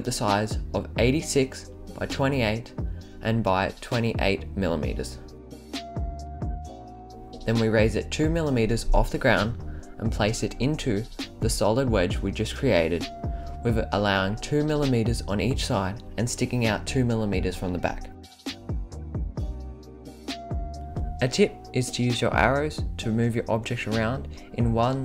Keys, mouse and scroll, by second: 1.7-4.5 drag, 5.9-6.6 drag, 7.1 click, 8.2 click, 8.5 drag, 8.7-9.0 right drag, 9.3 click, 12.0-12.6 right drag, 12.6-15.2 drag, 15.4 scroll up 2, 15.6 scroll down 1, 15.7 scroll up 1, 16.1 right drag, 16.5-16.9 scroll up 2, 16.9 middle drag, 17.7-18.0 right drag, 19.2-20.0 right drag, 21.1-21.8 right drag, 22.9 click, 23.2-23.7 right drag, 23.9 scroll down 1, 24.1-24.4 scroll up 1.